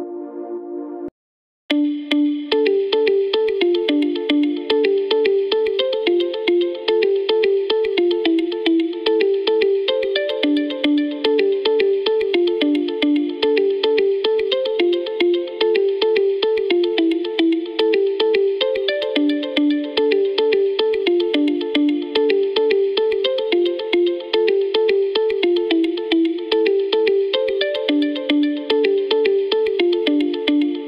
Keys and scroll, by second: 1.0 s.